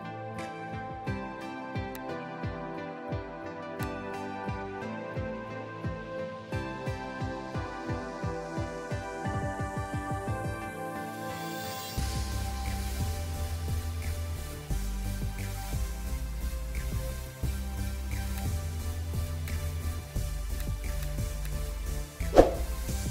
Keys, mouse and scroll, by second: 0.1 3, 6.5 ctrl+d.